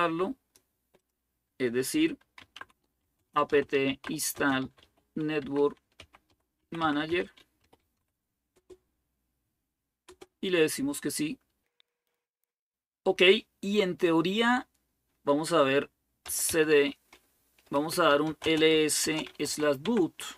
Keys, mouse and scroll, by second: 1.9-8.2 typing, 8.3 Return, 9.9 Return, 15.8-20.3 typing.